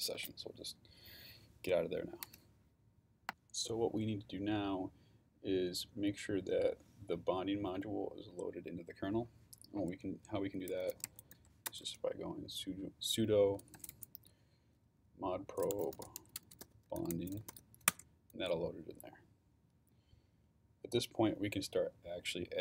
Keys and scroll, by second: 0.0 ctrl+c, 10.5-11.8 typing, 13.3-18.0 typing.